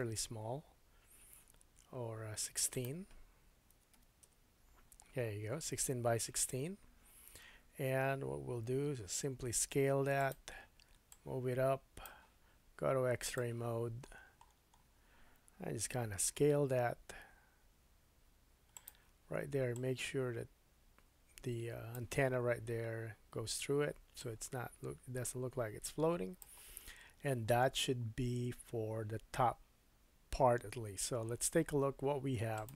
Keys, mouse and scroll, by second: 2.7 click, 9.6 s, 10.3 click, 13.2 click, 14.0-15.1 scroll up 6, 15.8 s, 18.9 click, 24.2 click, 26.9-27.8 scroll down 5, 32.5 click.